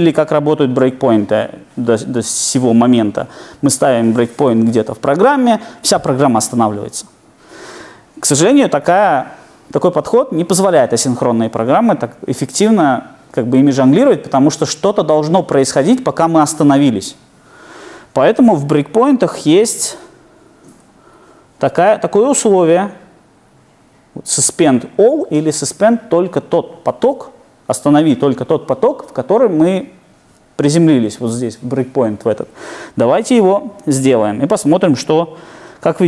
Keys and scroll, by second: 20.9 super+F8.